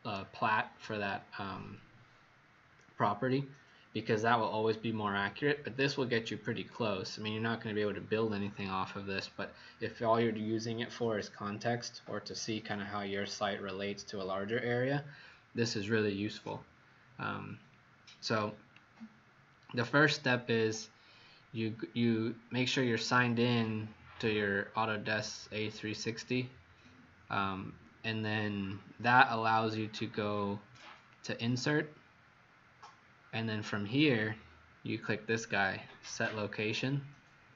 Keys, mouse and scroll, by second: 5.7-6.3 scroll down 1, 31.1 click.